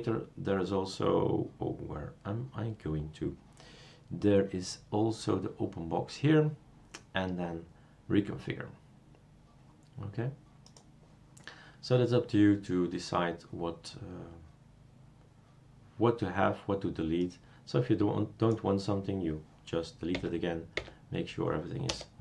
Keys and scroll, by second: 20.1 Delete, 20.7 Delete, 21.9 BackSpace.